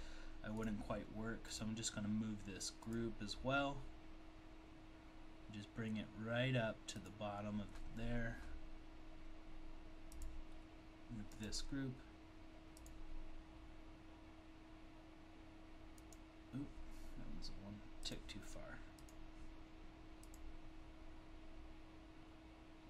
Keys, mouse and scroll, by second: 0.6 click, 2.9 click, 7.0 click, 10.2 click, 11.3-15.5 click, 15.1 click, 16.0 click, 19.1 click, 20.3 click.